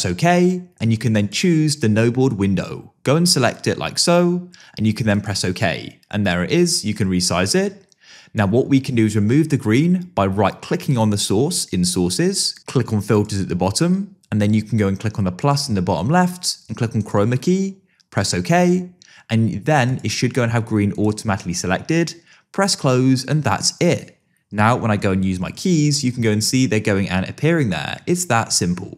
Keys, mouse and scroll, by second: 1.2 click, 3.5 click, 5.1 click, 6.7-8.5 drag, 15.4 click, 17.0 click, 18.2 click, 19.9 click, 21.0 click, 22.6 click, 24.7-26.6 typing, 28.1 a, 28.4 d.